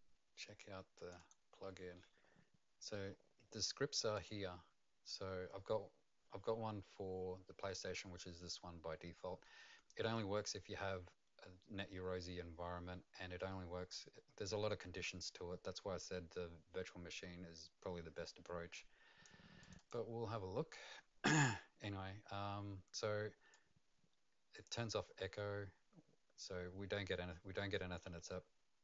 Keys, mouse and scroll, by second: 0.9 click, 1.2 click, 4.1 click, 18.7 click, 19.6 click, 19.7 click, 21.1-22.0 scroll down 1, 22.0-23.5 scroll down 3, 23.5 click, 23.5 scroll down 2, 24.9-26.8 scroll down 1, 26.8-28.8 scroll down 2.